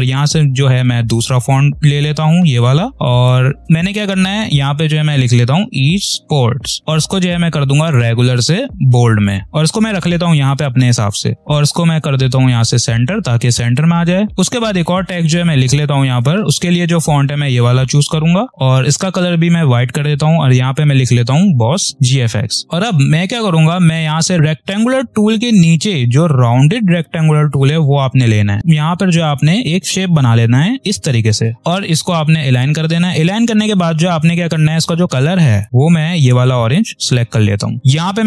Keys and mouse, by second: 2.9 ctrl+a, 5.3 e, 6.8 ctrl+a, 7.7-11.1 drag, 11.1 space, 11.3 click, 21.1 b, 22.6 click, 24.1 right click, 27.7-32.4 drag, 35.6 i, 36.5 click.